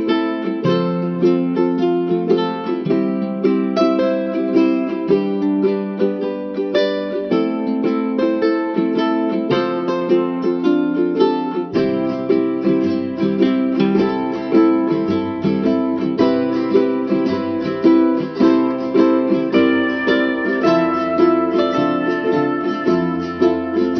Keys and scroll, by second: 22.1 ctrl+-.